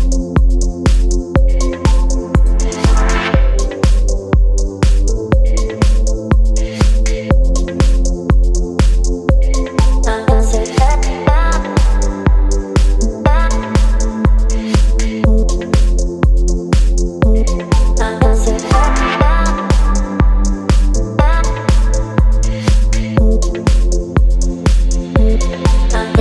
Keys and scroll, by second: 1.7 space, 11.5 v.